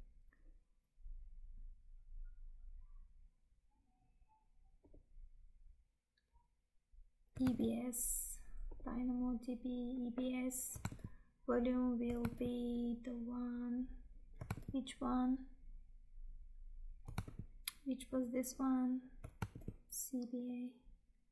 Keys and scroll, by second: 7.6 Tab, 11.0 Tab, 12.4 Tab, 14.7 Tab, 17.2 Tab, 19.6 Tab.